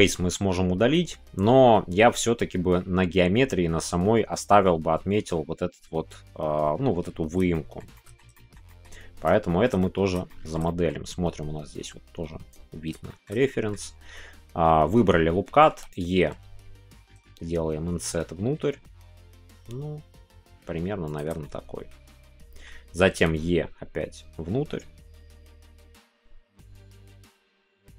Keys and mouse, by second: 7.5 shift+middle click, 8.3 middle click, 8.6 middle click, 9.5 shift+middle click, 9.8 middle click, 10.2 shift+middle click, 10.6-12.9 middle drag, 13.0 shift+middle click, 13.4 middle click, 15.9-17.6 right drag, 17.6 s, 21.1 shift+click, 21.4-22.7 middle drag.